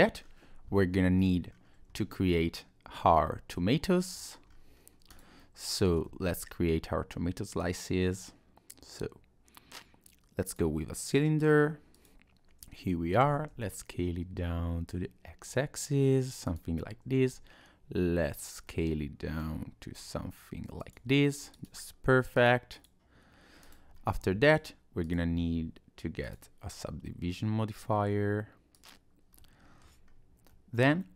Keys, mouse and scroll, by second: 0.2 middle click, 0.2-0.6 scroll down 2, 1.0 middle click, 1.5 scroll up 2, 1.9-2.5 scroll down 2, 3.1 middle click, 4.5 scroll up 1, 4.7-5.1 scroll down 2, 5.1 click, 5.4 middle click, 6.1 shift+a, 11.9 click, 13.2 s, 17.3 s, 18.7 middle click, 19.8 s, 21.5 click, 22.3 click, 22.8 click, 23.6 click, 23.9-24.4 scroll up 1, 24.4 click, 25.0 click, 28.7 click, 29.4 middle click, 30.1 scroll up 1, 30.5 middle click.